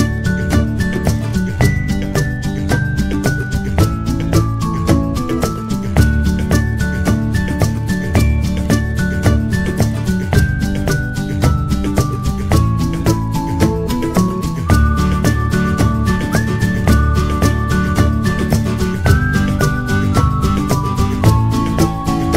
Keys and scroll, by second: 0.9 Return, 2.6-3.3 typing, 9.7 Return.